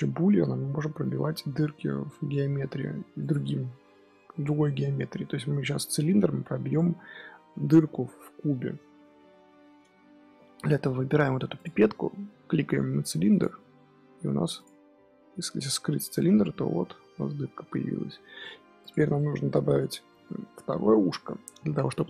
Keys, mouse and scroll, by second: 0.1-1.1 middle drag, 1.1-1.7 scroll up 4, 1.7-3.1 middle drag, 3.1 click, 8.9-11.5 middle drag, 11.5 click, 14.5 click, 16.1 h, 16.4-17.3 middle drag, 17.3-17.9 scroll down 6, 17.9-18.7 middle drag, 18.7 click, 19.1-22.0 middle drag.